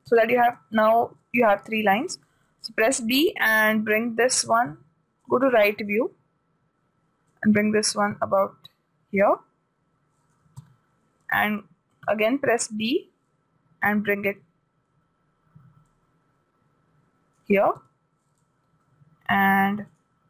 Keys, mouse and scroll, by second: 0.5 a, 2.8 b, 6.3-7.5 drag, 7.8-9.4 drag, 11.0 a, 11.7 b, 14.3-16.2 drag, 18.2 a.